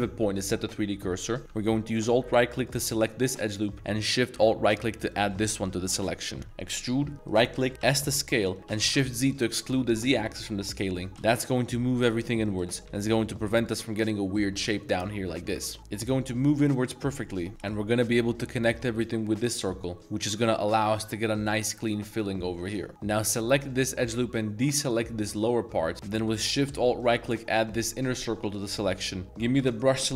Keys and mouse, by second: 1.9 alt+click, 3.3 middle click, 5.1 alt+shift+click, 5.8 middle click, 6.4 middle click, 7.5 middle click, 7.5 e, 7.8 s, 8.8 shift+z, 12.6 middle click, 13.1 s, 13.6 click, 14.4 middle click, 14.7 middle click, 15.4 ctrl+z, 15.7 middle click, 17.5 shift+middle click, 17.5 shift+z, 17.7-18.2 middle drag, 19.6-20.2 middle drag, 20.1 z, 20.8 z, 22.5 middle click, 22.9 2, 23.7 middle click, 24.2 c, 25.9 z, 27.0 alt+shift+click, 27.6 z, 28.6 middle click, 29.5 c.